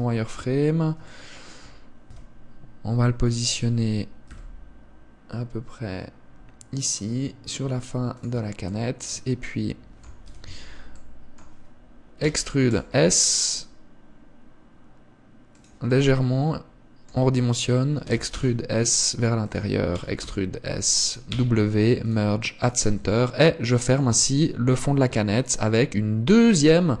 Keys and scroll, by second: 18.4 e, 21.7 w, 23.4 Tab.